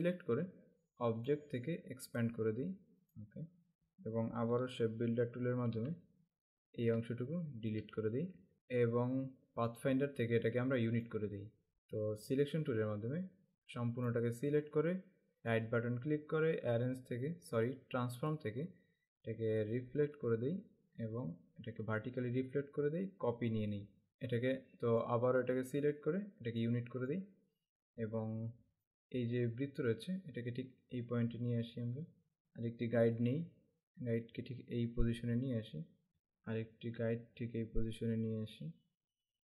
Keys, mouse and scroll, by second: 3.8 click, 5.5 shift+m, 9.8 click, 11.1 click, 11.7 v, 13.4 click, 15.6 right click, 18.3 click, 19.8 click, 23.5 click, 25.1 click, 28.9 click, 30.2 click.